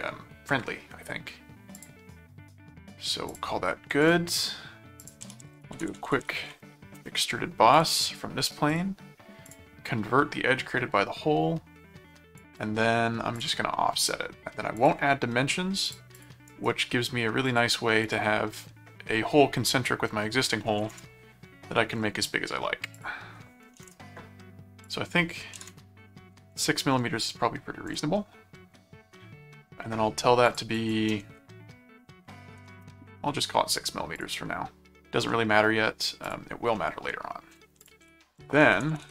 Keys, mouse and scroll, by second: 1.7 click, 3.3 click, 4.0 click, 5.0 click, 5.0-6.6 typing, 7.0 Return, 7.7 click, 8.7 click, 9.5 click, 12.4 click, 13.4 click, 14.8 click, 15.8 click, 16.4 right click, 17.4 click, 22.9 click, 24.8 click, 27.9 click, 30.5 click, 34.2 click, 35.3 middle click, 36.2 click, 36.7 middle click, 37.8-39.1 typing, 37.8 click.